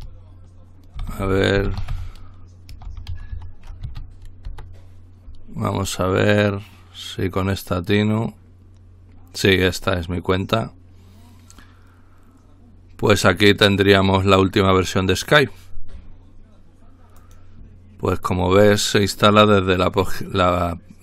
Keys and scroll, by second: 0.0-3.8 typing, 4.4 Return.